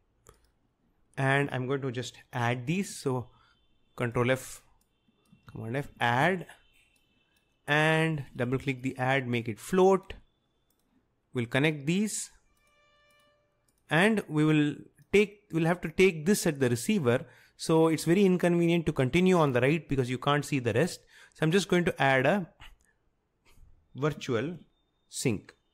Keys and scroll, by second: 0.0-0.3 typing, 5.5 ctrl+f, 5.6-6.7 typing, 24.6 ctrl+f.